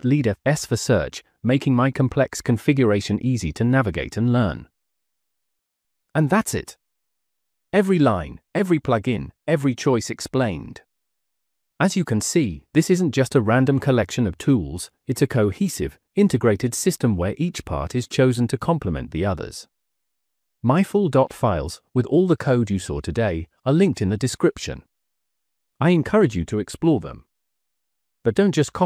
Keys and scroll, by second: 0.0-1.1 typing, 2.4 Escape, 2.4 space, 2.4 c, 3.5-5.9 typing.